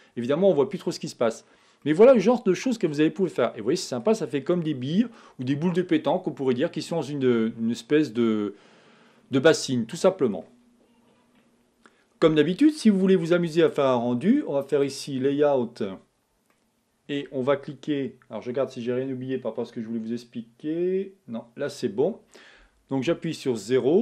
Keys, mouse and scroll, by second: 1.1-1.8 scroll down 4, 1.8-4.2 middle drag, 4.2-4.7 scroll down 1, 4.7-7.8 middle drag, 7.8-8.2 scroll down 2, 8.2-15.5 middle drag, 15.5 click, 16.5-23.2 middle drag, 23.2 KP_0.